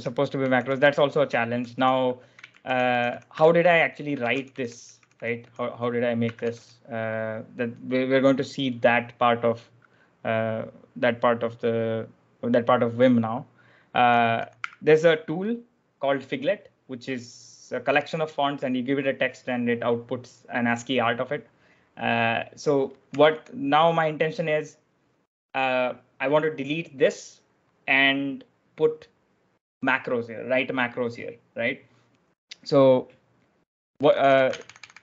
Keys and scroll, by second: 0.0-6.9 typing, 8.9-9.6 typing, 13.7-15.0 typing, 23.0 typing, 33.9-35.0 typing.